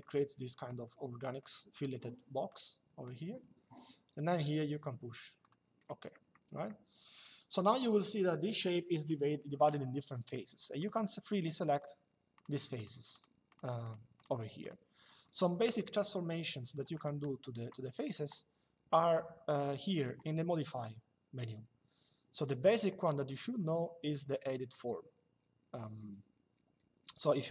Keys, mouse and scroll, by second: 1.1 click, 2.2 click, 5.1 click, 5.8 middle click, 6.4 shift+middle click, 10.5 click, 15.3 middle click, 15.7 shift+middle click, 19.7 click.